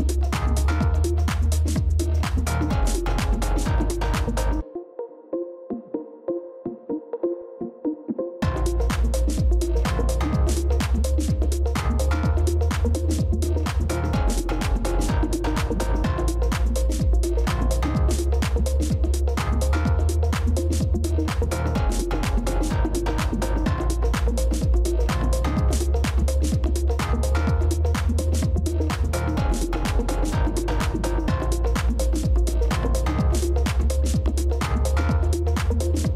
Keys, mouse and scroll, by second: 1.3-4.6 scroll down 1, 7.4 shift+click, 16.7 ctrl++, 19.1 shift+click, 22.8 ctrl+c, 23.4 ctrl+f, 24.7 shift+click.